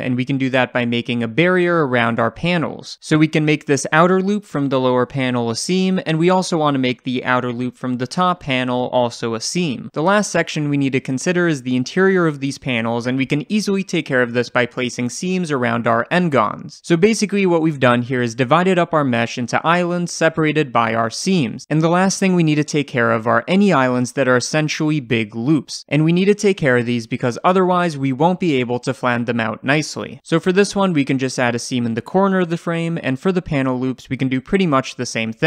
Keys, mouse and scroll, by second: 3.4 ctrl+click, 3.6 shift+middle click, 4.0 ctrl+click, 4.2 shift+middle click, 4.7 ctrl+click, 4.9 shift+middle click, 5.4 ctrl+click, 5.9 shift+middle click, 6.1 scroll up 2, 6.4 click, 6.6 ctrl+click, 6.7 scroll down 1, 6.9 shift+middle click, 7.1 scroll up 2, 7.5 ctrl+click, 7.6 scroll down 1, 7.7 shift+middle click, 7.8 scroll up 1, 8.2 ctrl+click, 8.3 scroll down 1, 8.5 shift+middle click, 8.8 scroll up 1, 9.3 ctrl+click, 10.0-13.8 right drag, 10.0 scroll down 1, 13.3 3, 13.8 click, 14.4 shift+click, 15.0 2, 15.4-30.0 right drag, 30.0-31.3 shift+middle drag, 30.5-31.3 scroll up 1, 31.3 click, 32.5 middle click, 32.7-33.3 scroll up 4, 33.3 click, 33.7 ctrl+click, 33.9 right click, 34.1 scroll down 1, 34.3 shift+middle click, 34.5-34.9 scroll up 4, 34.9 click, 35.2 ctrl+click.